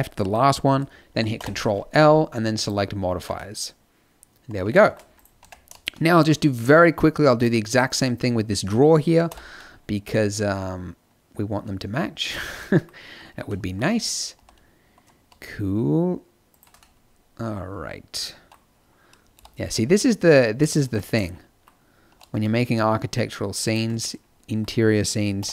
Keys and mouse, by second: 1.3 ctrl+l, 3.1 a, 5.1 click, 5.4 Tab, 6.2 click, 9.2 i, 14.3 e, 15.3 middle click, 15.9 click, 16.9 middle click, 19.3 i, 22.0 e, 25.3 i.